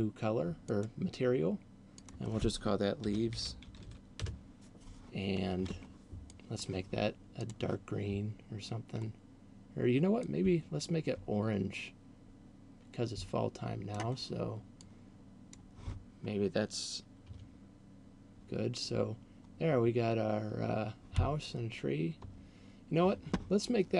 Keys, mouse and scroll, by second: 0.8 click, 2.0 click, 6.3 click, 7.3 click, 14.8 click, 22.3 Escape.